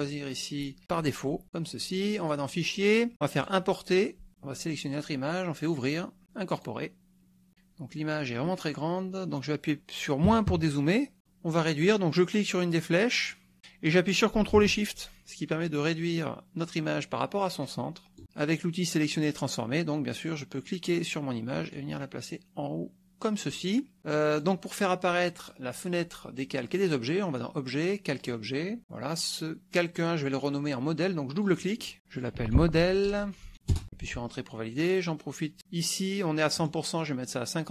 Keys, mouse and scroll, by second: 0.0 click, 1.0 click, 2.3 click, 3.5 click, 5.7 click, 6.6 click, 10.4 KP_Subtract, 13.3-18.2 drag, 19.1 click, 20.7-23.6 drag, 24.4 click, 25.4 click, 28.4 click, 31.4 click, 31.7-33.1 typing, 33.7 Return, 36.6 right click.